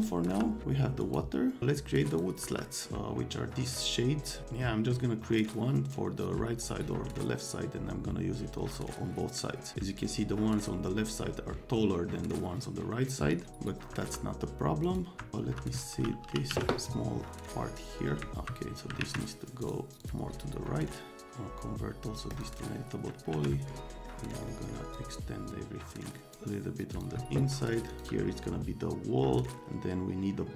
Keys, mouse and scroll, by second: 0.3 F3, 1.0 right click, 2.1 click, 2.4 F3, 13.9 F3, 14.8 click, 15.1 F3, 15.4 F3, 16.2 t, 16.5 z, 17.4 click, 19.0 alt+q, 19.6 click, 20.0 click, 22.3 click, 23.3 1, 23.9 click, 24.4 click, 24.9 click, 26.9 click, 27.9 click, 28.0 F3.